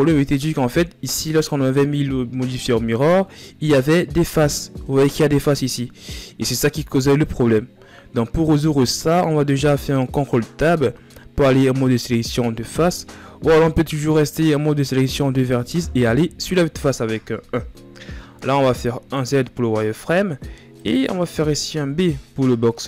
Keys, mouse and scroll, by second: 0.7-2.3 scroll up 3, 2.3-2.8 scroll up 1, 2.8-13.5 middle drag, 13.5 right click, 14.4 ctrl+z, 15.7 KP_1, 17.6 scroll down 2, 17.9-18.7 scroll up 2, 18.7 z, 20.4-22.8 right drag.